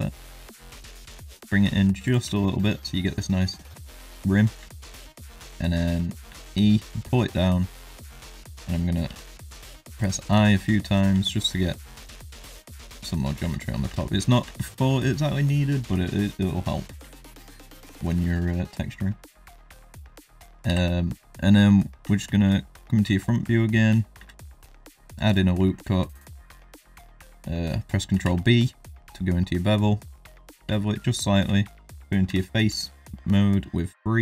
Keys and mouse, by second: 2.3 shift+middle click, 2.7 middle click, 4.7 shift+middle click, 6.3 e, 9.0 i, 10.3 i, 11.1 i, 12.3 i, 13.4 Tab, 13.6 click, 13.9 Tab, 14.2 shift+middle click, 14.4 Tab, 14.8 middle click, 15.4 middle click, 16.0 shift+middle drag, 16.6 middle drag, 17.1 shift+middle drag, 18.0 middle drag, 19.5 middle drag, 20.0 shift+middle drag, 20.6 KP_1, 21.4 shift+drag, 22.0 Tab, 22.3 shift+click, 23.1 shift+click, 24.1 ctrl+r, 25.6 shift+middle click, 28.1 ctrl+b, 30.7 shift+middle click, 31.3 3, 31.9 3, 32.2 3, 32.7 shift+middle click.